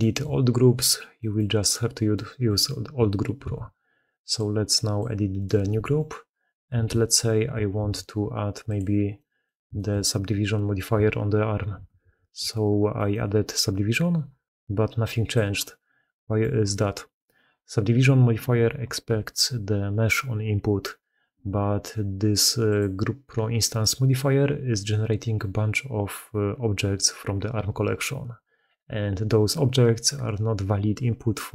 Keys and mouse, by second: 1.0 click, 2.0 click, 3.3 ctrl+x, 5.2 click, 5.6 g, 6.6 KP_Decimal, 7.6 ctrl+x, 9.0 middle drag, 9.6 shift+middle drag, 10.4 middle drag, 11.6 ctrl+1, 11.9 ctrl+2.